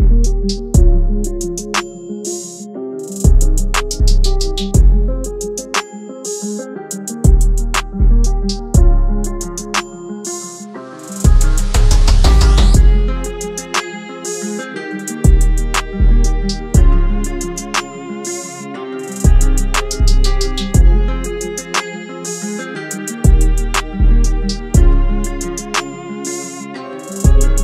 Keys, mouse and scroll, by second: 3.9 typing, 6.1 double click, 8.7-9.5 typing, 9.9 double click, 13.5-14.0 typing, 15.3 double click.